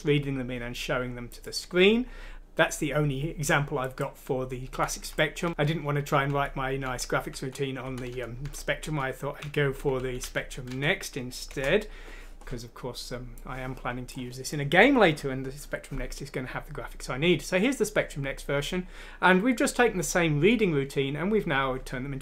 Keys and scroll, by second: 5.4 F6, 5.5 Down, 5.5 Up, 6.3 Up, 7.3 Up, 7.8 Down, 8.1 Down, 8.4 Down, 8.8 Down, 9.4 Up, 9.7 Up, 10.0 Up, 10.2 Up, 10.7 Down, 11.5 Return.